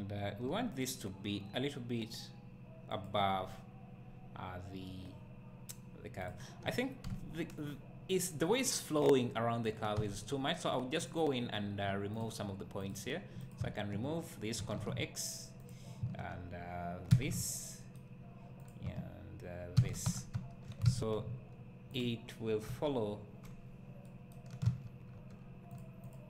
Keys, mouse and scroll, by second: 0.5 g, 3.4-4.1 scroll up 2, 4.1-6.2 scroll up 1, 6.2 click, 6.6-7.1 scroll down 2, 7.1 `, 9.9 Tab, 11.0 click, 14.6 ctrl+x, 15.6 click, 17.1 ctrl+x, 18.6 click, 19.7 ctrl+x, 20.0 Tab, 20.3 `, 20.8 alt+a, 22.0 click, 22.7 KP_1, 23.5 scroll up 1, 24.8 z, 25.2 Tab, 25.8 click.